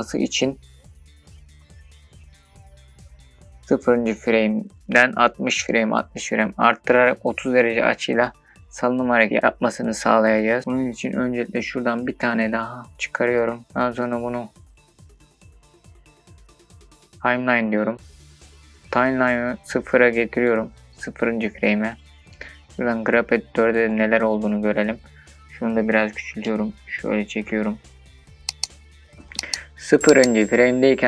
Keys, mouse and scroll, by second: 4.1-28.3 drag, 28.3-31.0 shift+middle drag, 28.3-28.9 scroll down 3.